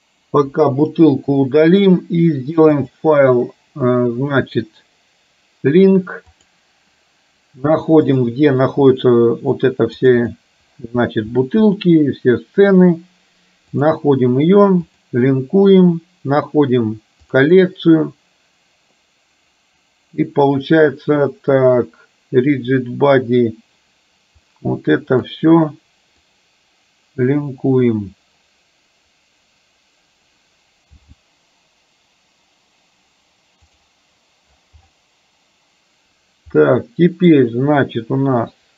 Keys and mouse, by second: 0.6 Delete, 2.9-6.8 drag, 31.2 g, 36.8 middle click.